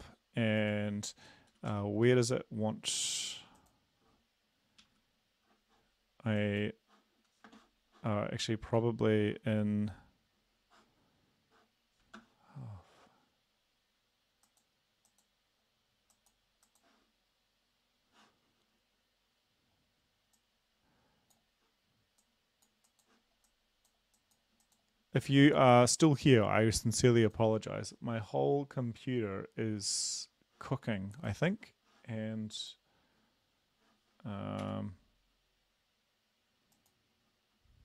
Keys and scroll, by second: 1.7 Down, 1.9 Down, 2.0 Down, 4.8 Up.